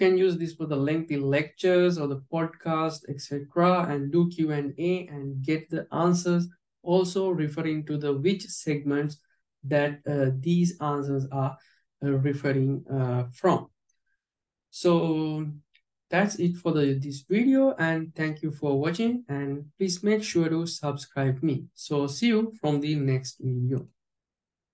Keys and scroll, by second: 0.0 alt+j.